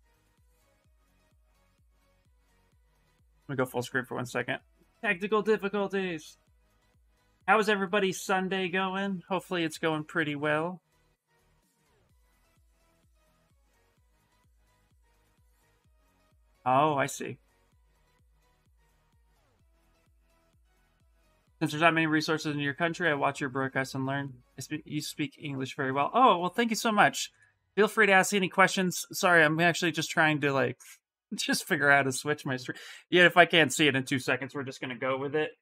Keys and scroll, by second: 34.6-35.6 typing.